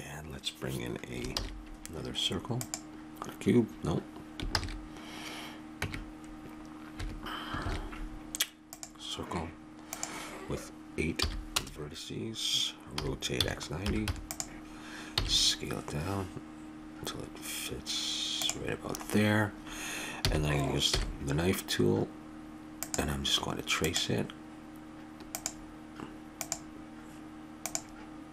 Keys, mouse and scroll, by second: 1.4 shift+a, 4.5 ctrl+z, 5.8 Tab, 7.6 shift+a, 9.9 click, 13.0 r, 15.1 s, 18.9 middle click, 20.2 a, 20.9 k.